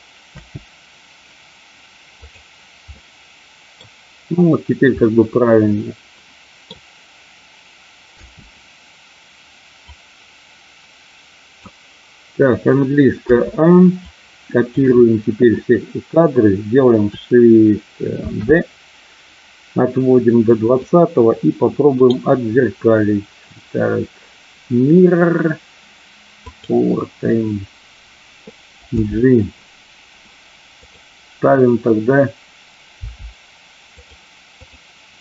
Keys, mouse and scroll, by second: 0.3 space, 3.0 middle click, 4.9-6.5 middle drag, 8.1 space, 9.8-11.6 drag, 13.1 a, 13.9 click, 18.2 shift+d, 20.7 click, 21.9-26.7 right drag, 28.9 g, 32.8 g, 33.9 click, 34.5 click.